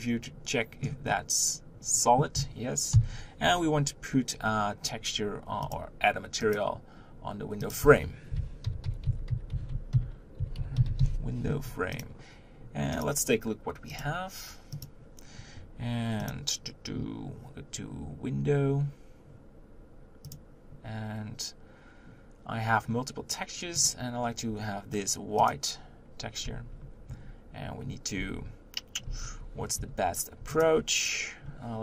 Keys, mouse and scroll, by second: 2.9 KP_1, 6.7-11.2 drag, 14.1-25.6 drag, 27.1 Tab, 29.7 3, 30.6 click.